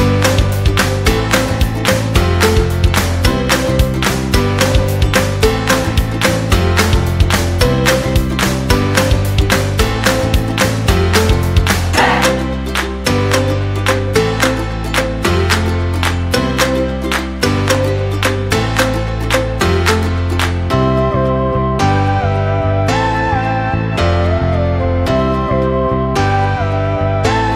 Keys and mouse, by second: 1.4 middle click, 2.4 right click, 2.7 middle click, 3.6 g, 4.7 Tab, 5.3 middle click, 5.6 KP_1, 7.0 Tab, 8.0 right click, 8.5 shift+right drag, 9.3 shift+right click, 9.8 shift+right click, 10.3 s, 11.4 g, 12.7 Tab, 13.4 KP_3, 14.1 shift+middle drag, 15.1-15.7 shift+middle drag, 15.7 Tab, 16.7 c, 18.2 g, 19.2 Tab, 19.7 shift+middle click, 20.2 Tab, 20.7 alt+z, 21.0 shift+middle click, 22.1 right click, 22.5 g, 24.0 right click, 24.3 g, 25.9 right click, 26.1 g, 27.2 c.